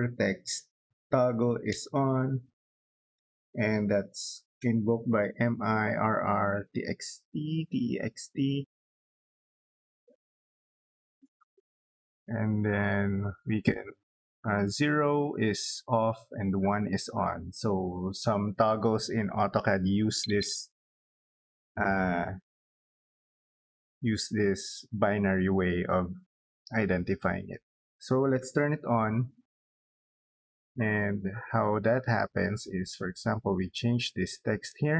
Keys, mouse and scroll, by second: 1.2-2.8 typing, 3.8 x, 4.1 t, 10.9 Return, 28.4 1, 28.5 space, 29.6 middle click, 30.1 scroll up 2, 31.3 click, 33.2 click, 33.4 click, 34.3 click.